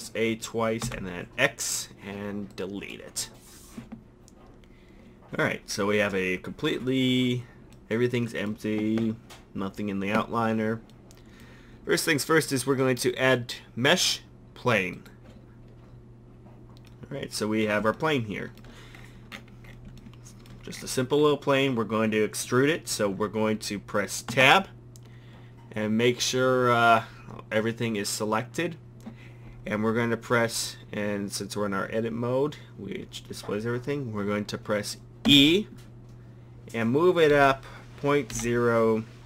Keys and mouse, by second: 0.8 x, 7.8 drag, 12.7 click, 17.0 drag, 24.3 Tab, 35.3 e.